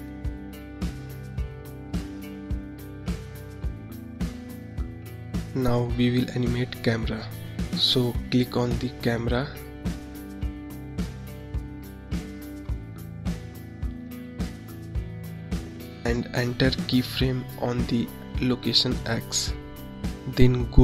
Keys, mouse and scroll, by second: 0.6-1.2 scroll up 2, 3.3 click, 4.4 scroll down 1, 7.9 click, 13.7 click, 17.5-20.8 drag.